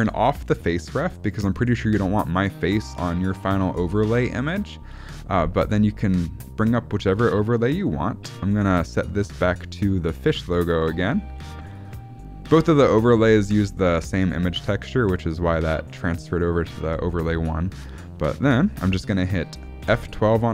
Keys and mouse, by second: 6.0 click, 6.5 click, 7.6 shift+middle click, 9.2 click, 10.4 click, 20.1 F12.